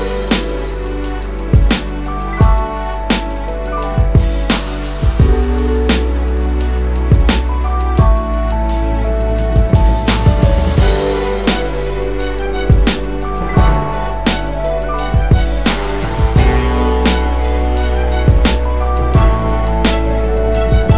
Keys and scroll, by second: 9.8 BackSpace, 10.1 BackSpace, 11.9 typing.